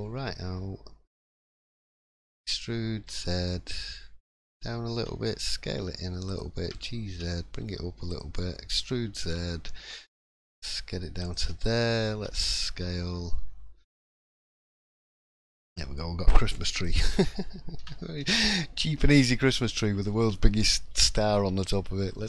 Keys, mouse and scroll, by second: 14.6-15.2 scroll down 4, 14.9 middle click, 16.8 click, 17.8 l, 18.1 middle click, 18.9-19.5 scroll up 2, 19.5 click, 19.8 shift+middle click, 20.0 scroll up 1, 20.3 middle click, 20.9 3, 21.6 click, 22.0 middle click.